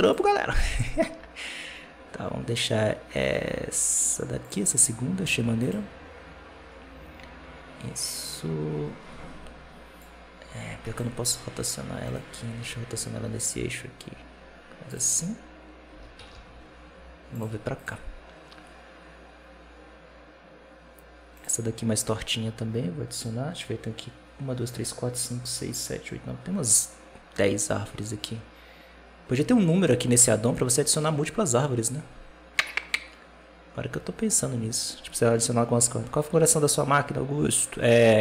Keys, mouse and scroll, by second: 5.5-8.6 drag, 9.9-10.8 drag, 12.0 right click, 12.3 r, 15.8 g, 17.7-20.8 drag.